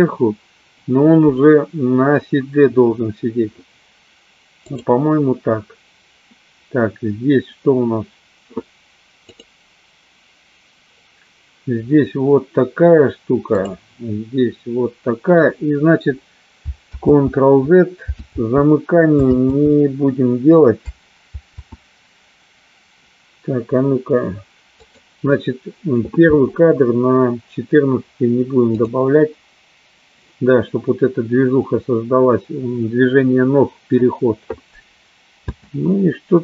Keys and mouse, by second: 5.2 click, 9.8 click, 14.1 click, 17.8 ctrl+z, 19.1 ctrl+z, 20.2 ctrl+z, 25.3 click, 29.3 click, 35.6 space.